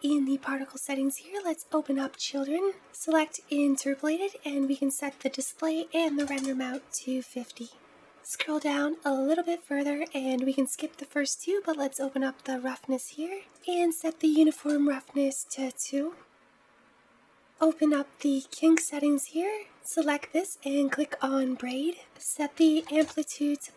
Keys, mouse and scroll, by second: 0.6 scroll down 3, 1.9-2.9 drag, 3.8-7.0 drag, 8.1-9.9 scroll down 10, 9.9-11.8 scroll down 1, 11.8-15.8 drag, 16.2-16.8 scroll down 1, 16.8-17.3 scroll down 5, 17.3-20.4 drag, 21.9-23.7 drag.